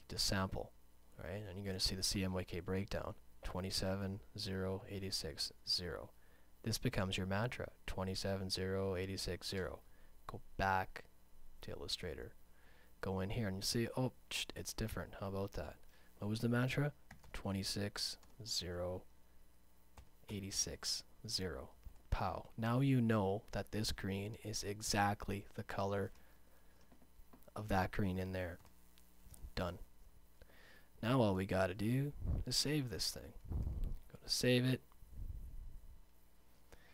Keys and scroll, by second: 17.7 2, 18.8 Tab, 20.9 6, 22.5 Return, 26.8 space, 27.4 space, 29.3 super+0, 30.8 space.